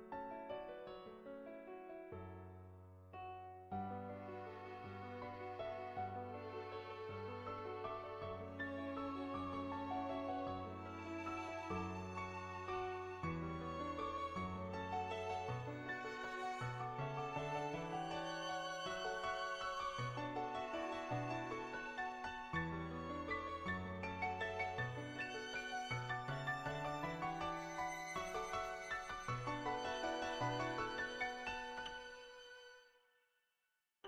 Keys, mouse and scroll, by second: 0.3 middle click, 1.1 shift+middle click, 1.4-4.9 middle drag, 5.2 shift+middle click, 6.1 shift+click, 7.2 n, 9.3 click, 10.2 click, 11.2 middle click, 11.9 n, 12.4 click, 13.3 click, 14.0 click, 14.8 click, 15.8 click, 16.4 middle click, 17.5 click, 18.1 click, 18.7 middle click, 19.8 click, 20.6 click, 21.0 click, 21.5 middle click, 21.9 click, 22.5 click, 23.5 middle click, 24.5 middle click, 24.5 n, 24.8 shift+middle click, 24.9 middle click, 25.2 shift+middle click, 25.5 middle click, 25.8-28.0 shift+middle drag, 28.0-30.1 drag, 30.4 ctrl+z, 30.5 click, 31.2 ctrl+z, 31.6 click, 32.7 ctrl+z, 33.2-34.0 drag.